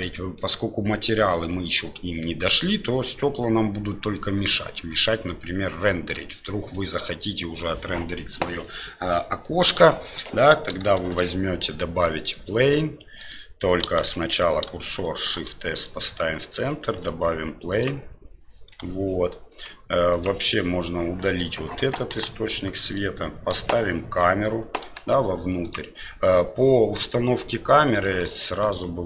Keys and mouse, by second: 1.0-2.5 middle drag, 6.7-7.6 middle drag, 10.9 shift+a, 12.7-13.3 drag, 14.0 ctrl+z, 15.2 shift+c, 16.8 shift+a, 18.7 s, 21.2 right click, 22.1 Delete, 22.8 right click, 23.5 KP_7, 24.8 g, 27.4-28.0 middle drag, 28.4 middle drag.